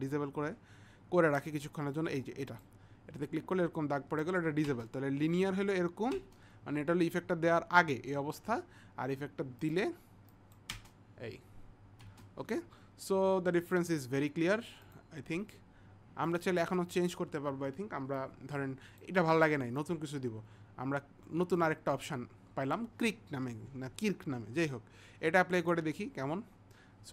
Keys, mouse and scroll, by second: 8.0 click, 9.7 click, 10.3 click, 13.7 click, 14.8 click, 19.9 click, 21.9 click, 22.8 click, 25.7 click.